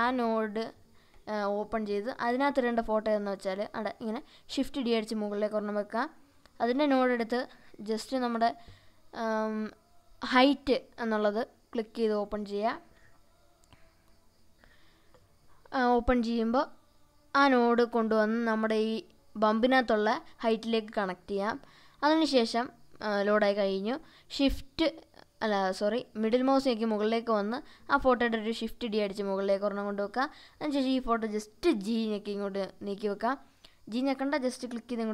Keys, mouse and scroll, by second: 3.4 click, 4.6 shift+d, 6.3 click, 7.6 click, 17.0-19.8 drag, 23.7-24.9 shift+middle drag, 25.8 click, 27.8 shift+d, 29.8 click, 30.8 click, 31.2-33.2 drag, 33.8-35.1 shift+middle drag.